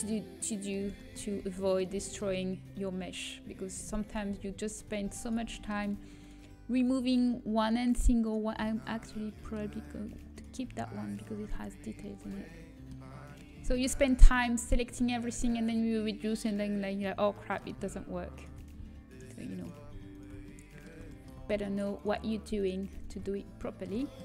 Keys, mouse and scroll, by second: 1.4 a, 3.1-16.5 middle drag, 16.8 middle click, 19.3-20.3 right drag, 20.3-24.2 middle drag.